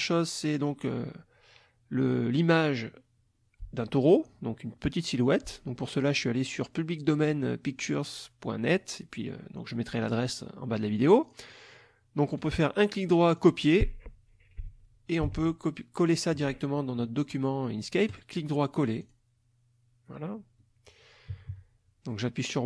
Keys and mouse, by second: 9.9 click, 11.2 click, 12.4 right click, 13.4 click, 15.3 alt+Tab, 16.1 alt+click, 18.1 right click, 19.0 click, 21.3 KP_Subtract.